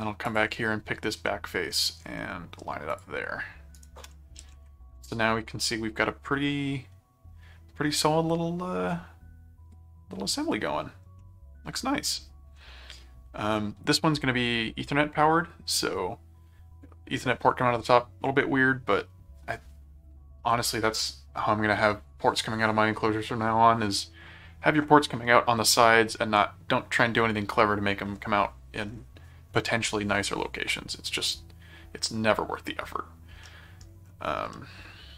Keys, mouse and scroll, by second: 0.2 click, 1.3 middle click, 2.9 click, 3.7 ctrl+right click, 4.4 ctrl+7, 5.1-10.8 middle drag, 11.2-12.5 middle drag, 13.5 middle click, 33.4 middle click, 34.5-35.1 middle drag.